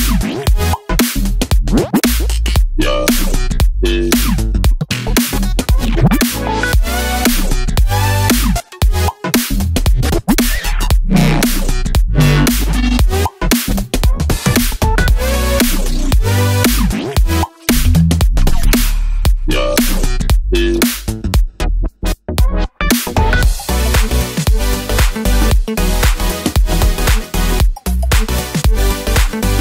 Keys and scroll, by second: 13.2 super+d, 13.6 Right, 13.8 Right, 13.8 Down, 13.9 Down, 14.0 Down, 14.2 Left, 14.3 Left.